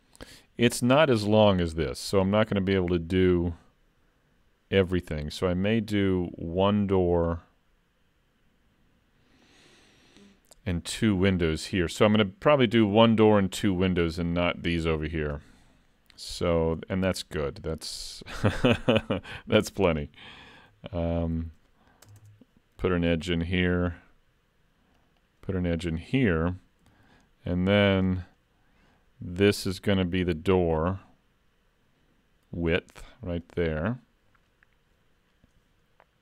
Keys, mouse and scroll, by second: 20.6 ctrl+r, 23.2 ctrl+r, 26.8 ctrl+r.